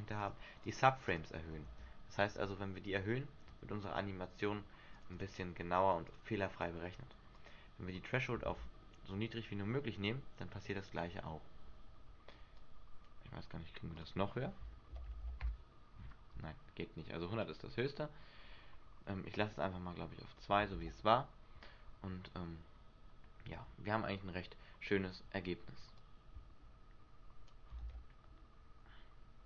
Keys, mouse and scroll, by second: 0.4 click, 1.2 click, 1.8 alt+a, 3.6 Escape, 5.1 click, 5.7 click, 6.2 click, 7.5 click, 8.6 alt+a, 11.8 Escape, 12.7 click, 14.1 click, 17.6 click, 20.8 alt+a, 23.8 Escape, 26.1 click, 27.9 alt+a.